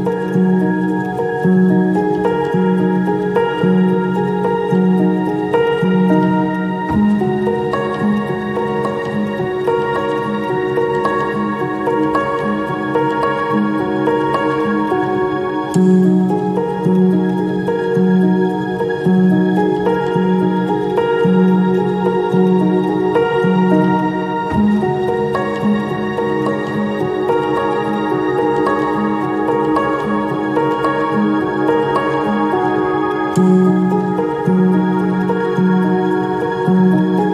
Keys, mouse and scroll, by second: 0.1 right click, 5.3 ctrl+click, 6.5 shift+click, 12.2 shift+click, 14.8 shift+click, 17.2 shift+click, 28.8 ctrl+shift+click, 29.2 ctrl+shift+click, 29.8 ctrl+shift+click, 30.7 ctrl+shift+click, 31.3 ctrl+shift+space, 33.1 ctrl+shift+click, 33.6 ctrl+shift+space, 36.4 ctrl+shift+space.